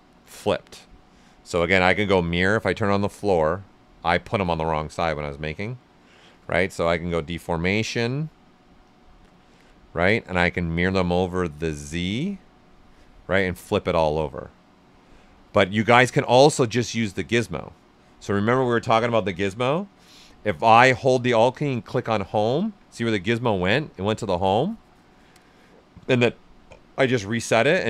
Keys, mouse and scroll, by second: 1.6-3.0 drag, 4.0-6.9 ctrl+right drag, 6.9-8.8 drag, 9.3-11.2 drag, 15.3 ctrl+z, 16.0 ctrl+right click, 16.8 typing, 20.8 typing, 21.8 alt+click, 27.1-27.8 drag.